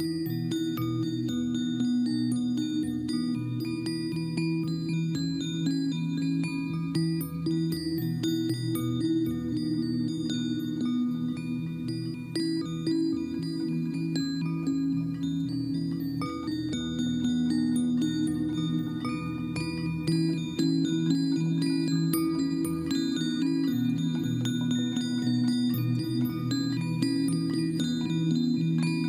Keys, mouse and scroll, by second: 4.7 ctrl+-, 15.1 ctrl+h, 15.2 ctrl+j, 17.2 ctrl+j, 19.9 ctrl+j, 21.8 right click, 24.9 ctrl+t.